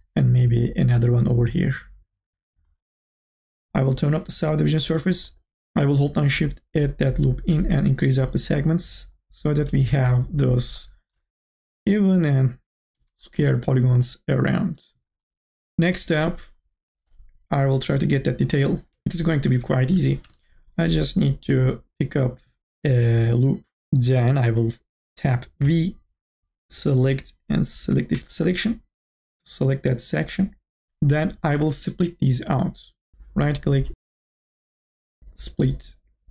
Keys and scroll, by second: 12.7 3, 13.0 e, 19.9 2, 25.6 v.